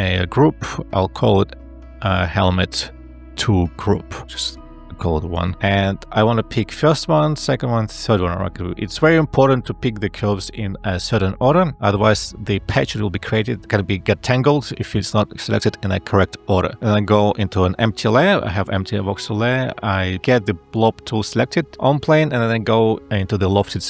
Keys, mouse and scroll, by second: 2.0-3.6 typing, 20.2 ctrl+b.